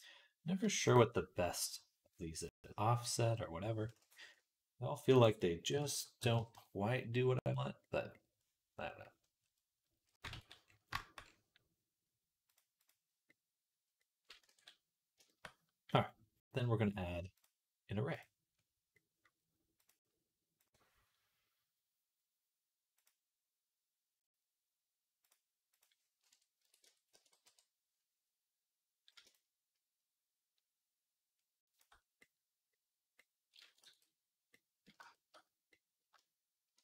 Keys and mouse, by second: 6.0 KP_0, 10.2 ctrl+s, 11.0-13.1 drag, 13.2 click, 14.0 click, 14.0 right click, 14.4 ctrl+s, 22.9-25.0 drag, 25.1 click, 26.7 Tab, 32.7 click, 33.7 ctrl+s, 34.4 click.